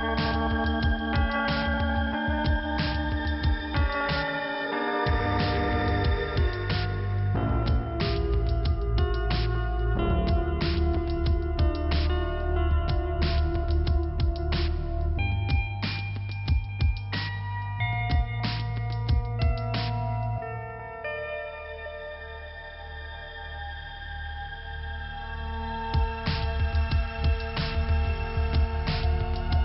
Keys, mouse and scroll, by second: 0.0-1.1 scroll up 1, 1.6 click, 3.0 click, 4.1 click, 4.3 click, 4.3 click, 4.7 click, 4.9 double click, 5.0 double click, 6.1 scroll up 2, 7.9 click, 9.5 click, 10.2-10.6 scroll up 1, 10.8 scroll down 1, 12.3 click, 12.4 scroll down 1, 13.1 click, 13.7 scroll up 1, 13.8 click, 14.0 click, 14.9 click, 16.4-16.9 scroll up 1, 18.2 click, 19.1 click, 20.8 click, 22.3 scroll up 1, 23.9 click, 24.7 right click, 25.5 click, 26.6 scroll down 1, 27.0-27.7 scroll up 1.